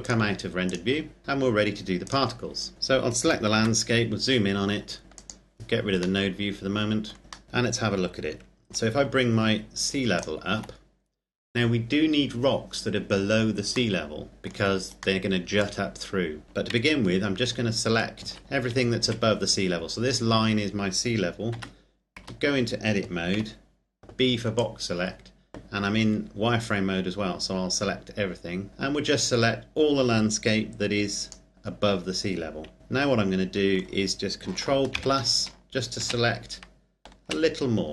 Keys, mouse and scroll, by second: 1.2 click, 2.7 right click, 3.6 KP_Decimal, 5.2 click, 6.3 middle click, 7.2 scroll down 1, 7.4-9.1 scroll up 1, 10.5 shift+click, 14.2 middle click, 15.8 middle click, 17.0 KP_1, 18.4 z, 18.9 z, 19.3 z, 21.8 Tab, 22.5 a, 23.6 b, 24.9 click, 32.8 middle click, 35.3 ctrl+KP_Add.